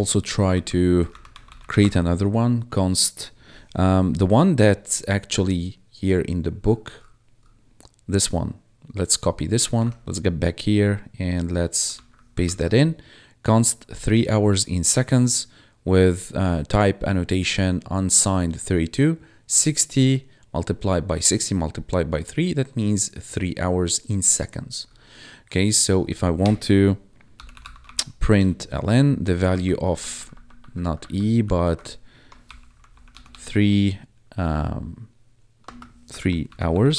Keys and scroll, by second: 0.4 Up, 0.8-2.1 typing, 9.8 Tab, 11.9 ctrl+v, 12.6 ctrl+s, 26.4 Return, 27.0-28.3 typing, 28.3 Tab, 30.0 ctrl+Right, 31.0 Right, 31.6 shift+Right, 32.1-33.6 typing, 35.6-36.9 typing.